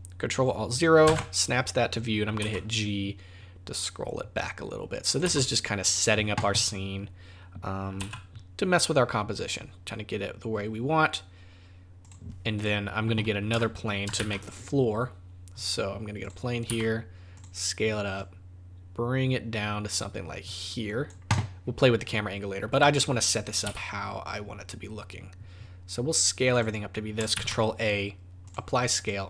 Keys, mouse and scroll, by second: 1.0 ctrl+alt+KP_0, 2.4 g, 5.2 g, 8.0 g, 12.5 click, 14.1 shift+a, 16.7 s, 18.2 click, 22.7 click, 23.6 s, 27.3 ctrl+a, 28.9 click.